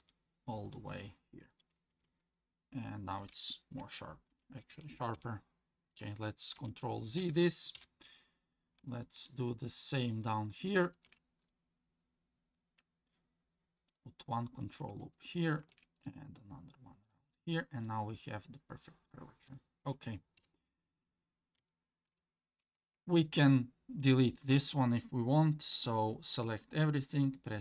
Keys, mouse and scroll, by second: 1.9 Tab, 2.2 middle click, 4.3 ctrl+z, 4.7 ctrl+z, 6.6 ctrl+z, 7.7 KP_1, 8.4-8.9 scroll down 3, 8.9 shift+middle click, 9.5-10.7 scroll up 3, 10.9 ctrl+r, 15.6 ctrl+r, 17.4 Tab, 17.9-19.1 middle drag, 19.5 shift+middle drag, 20.4 KP_1, 21.1 Tab, 21.7 shift+middle click, 23.2 alt+click, 27.5 x.